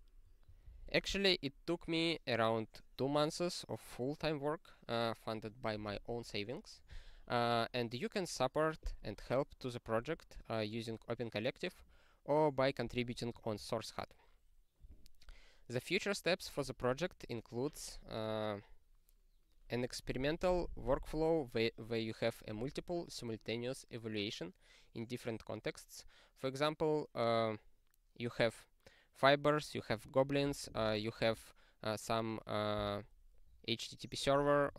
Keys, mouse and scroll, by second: 7.8-13.5 scroll down 4, 13.5-14.7 ctrl+n, 15.4-17.9 scroll down 63, 17.9-19.6 scroll down 5.